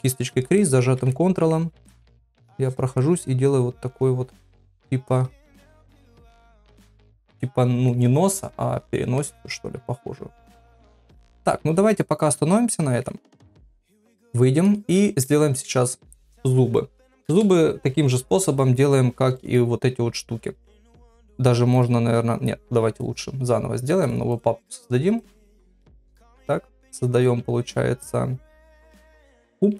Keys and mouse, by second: 0.0 ctrl+click, 0.3 ctrl+click, 0.6 middle click, 1.5 middle click, 2.2 ctrl+click, 2.5 ctrl+click, 2.7 ctrl+click, 3.0-4.1 middle drag, 4.4 ctrl+click, 4.7 ctrl+click, 5.1 ctrl+click, 5.4 middle click, 6.7 ctrl+middle click, 7.0 middle click, 9.2-13.0 middle drag, 13.9 ctrl+Tab, 15.3 middle click, 19.3 middle click, 20.9 middle click, 21.7 click, 24.1 click, 24.3 click, 25.2 click, 25.8 click, 26.7 shift+a.